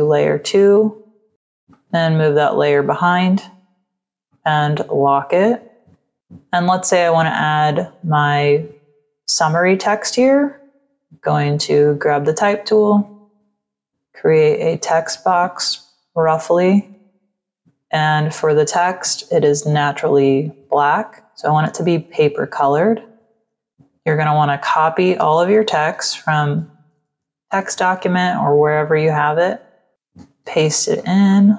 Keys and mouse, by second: 0.9 click, 1.6 click, 4.2 click, 11.1 click, 12.8 click, 19.6 click, 22.1 click, 23.6 click, 24.3 click, 25.8 t, 26.0 click, 26.7 ctrl+a, 27.4 ctrl+c, 29.8 click, 31.2 ctrl+click.